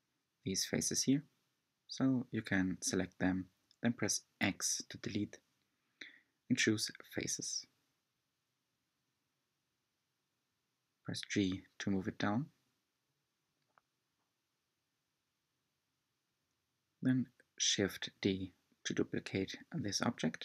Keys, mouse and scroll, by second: 0.2 click, 0.7-2.0 middle drag, 2.0 shift+click, 2.4-4.4 middle drag, 4.4 shift+click, 7.4 x, 8.1-9.6 middle drag, 9.6 Tab, 10.6 g, 17.0-19.7 middle drag, 19.7 s.